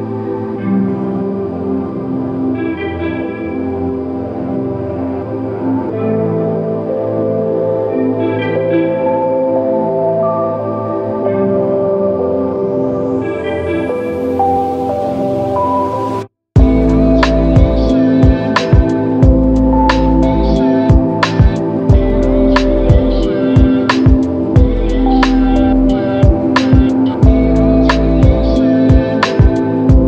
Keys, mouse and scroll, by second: 4.1-5.2 ctrl+scroll down 1, 18.7 ctrl+scroll up 1, 21.4 ctrl+scroll down 1.